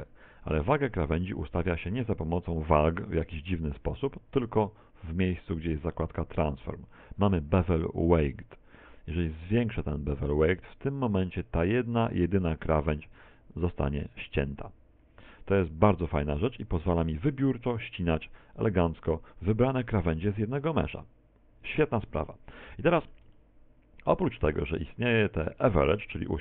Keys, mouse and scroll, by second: 2.7-4.8 scroll up 3, 12.7 click, 24.6 middle click.